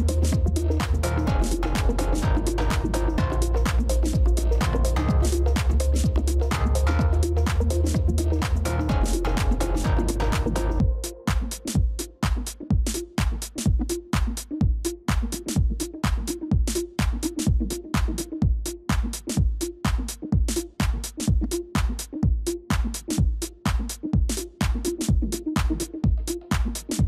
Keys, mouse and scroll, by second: 3.2 ctrl++, 3.4 ctrl++, 12.6-14.1 scroll up 1, 14.2 ctrl+-, 14.4 ctrl+-, 14.6 ctrl+-, 17.4 ctrl++, 17.6 ctrl++, 20.1 alt+click, 22.3 ctrl+d, 23.8 ctrl+-, 24.0 ctrl+-, 25.0 ctrl++, 25.1 ctrl++, 26.9 ctrl+z.